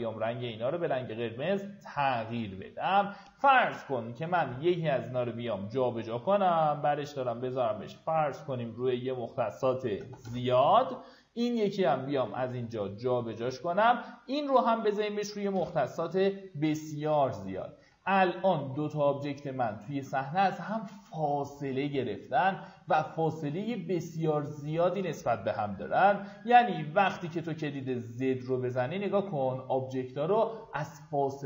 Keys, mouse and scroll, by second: 3.8 w, 6.5 click, 9.9 KP_0, 12.1 click, 15.3 KP_0, 16.5 click, 17.3 alt+w, 17.8 alt+w, 18.9 alt+middle click, 19.7 middle click, 20.2 alt+middle click, 20.8 click, 27.1 z.